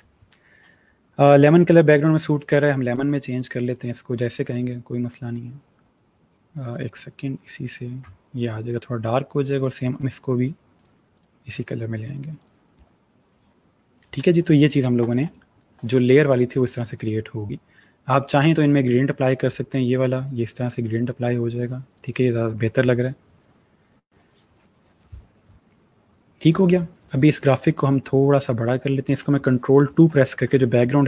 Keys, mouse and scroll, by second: 3.6 click, 6.5 click, 14.4-15.0 alt+scroll down 1, 15.0 scroll down 1, 15.1 space, 15.2 click, 15.6 space, 16.7 click, 27.5 click, 30.1 ctrl+2, 30.8 click.